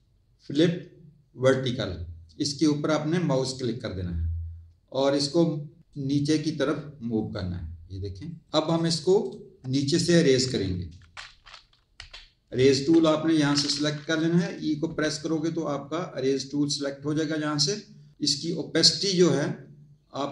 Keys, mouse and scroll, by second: 3.3 click, 5.9 click, 8.6 alt+click, 9.2 alt+click, 10.4 Tab, 11.9 e, 12.7 Tab, 14.8 e.